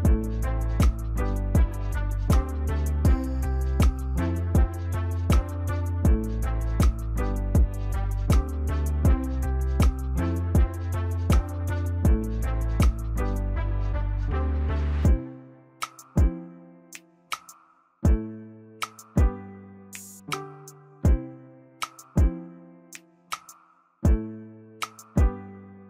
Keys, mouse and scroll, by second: 2.6 double click, 11.3 ctrl+t, 12.4 shift+click, 16.8 alt+click.